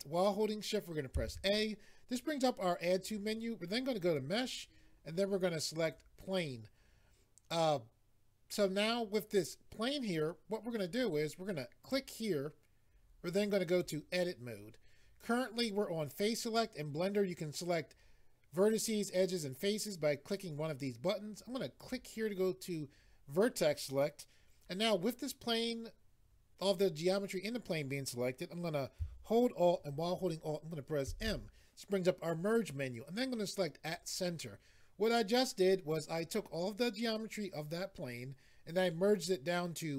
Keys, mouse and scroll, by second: 5.8 click, 11.8 click, 13.7 click, 21.8 click, 31.1 alt+m, 33.8 click.